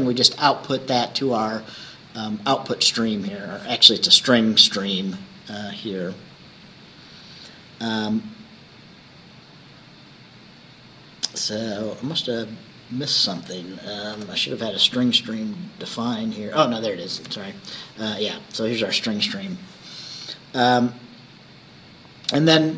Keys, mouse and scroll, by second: 1.9 scroll up 2, 6.5 scroll down 2, 12.2 click, 14.2 Return, 16.0 s, 17.2 BackSpace, 18.4 scroll down 2.